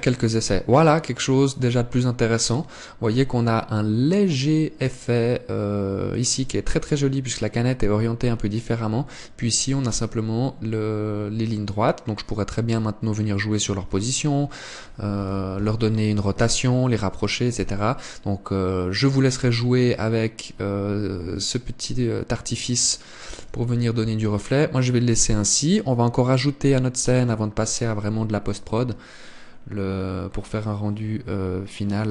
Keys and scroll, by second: 14.8 Escape, 16.2 KP_7, 17.1 r.